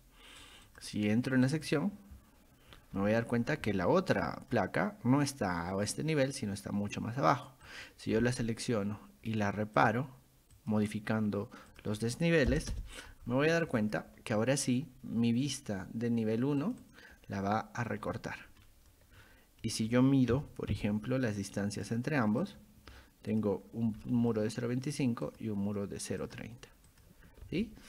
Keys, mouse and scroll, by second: 0.7 click, 1.5 click, 1.7 click, 2.7 scroll down 2, 3.0 middle click, 3.4 scroll up 2, 4.2 middle click, 7.7 click, 9.8 click, 10.6 click, 11.7 click, 13.8 click, 16.6 click, 16.8 click, 18.0 scroll up 2, 18.6 middle drag, 19.1 scroll up 2, 19.6 middle drag, 20.3 d, 20.7 i, 21.8 click, 22.4 click, 23.3 click, 24.0 middle click, 24.0-24.3 scroll up 1, 25.3 click, 26.2 click, 26.9 click, 27.3 scroll down 1.